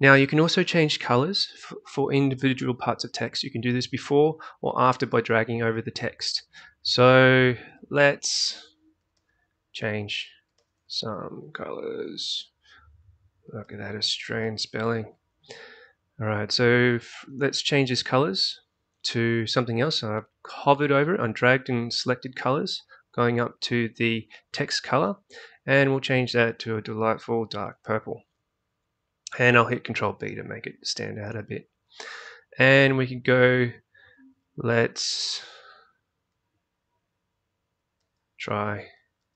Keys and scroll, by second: 7.6-13.6 typing, 30.2 ctrl+b, 35.4-39.3 typing.